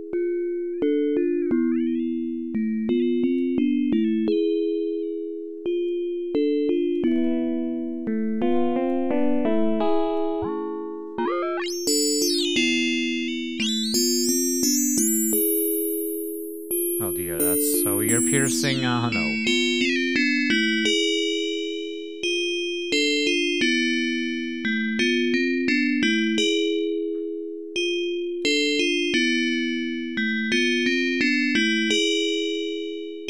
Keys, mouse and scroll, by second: 3.9-4.4 scroll down 2, 4.9 scroll down 1, 6.9-9.0 drag, 10.1-15.7 drag, 16.5 scroll down 2, 18.4-18.9 scroll down 2, 19.4-20.1 scroll down 4, 21.0-22.9 drag, 23.5 click, 24.4-26.7 drag, 28.0 click, 29.3-30.7 drag, 31.3-32.7 drag.